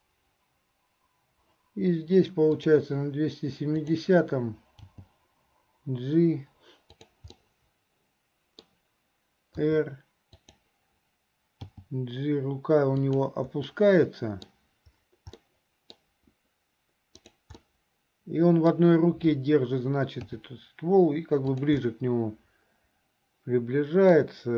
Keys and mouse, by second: 2.7 click, 7.5-8.8 middle drag, 13.9 click, 13.9 right click, 15.6 click, 15.6 right click, 17.2 click, 17.7 middle click, 17.8 click, 17.8 right click, 18.2 middle click, 20.2 g, 22.0-24.3 middle drag.